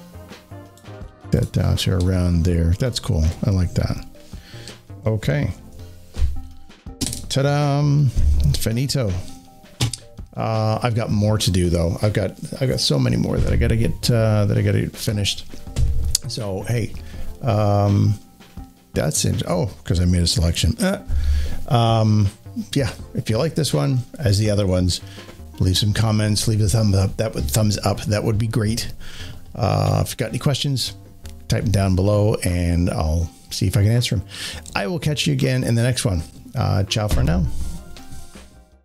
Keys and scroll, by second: 5.4 ctrl+0, 20.2 ctrl+alt+shift+d.